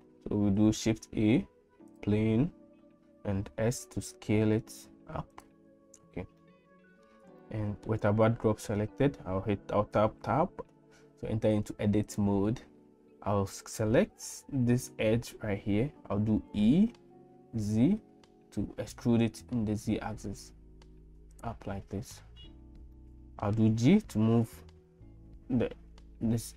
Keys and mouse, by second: 0.9 shift+a, 3.5 s, 6.4 middle click, 7.4 shift+middle click, 10.0 Tab, 12.0 click, 16.4 e, 23.0 middle click, 23.7 g.